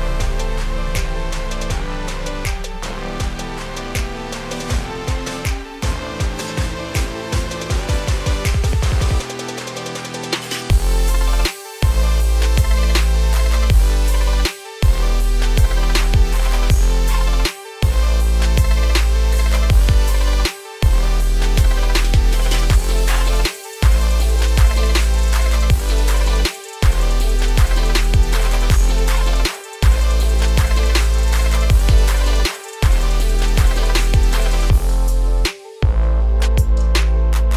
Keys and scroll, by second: 7.5 ctrl+a, 21.8 ctrl+a.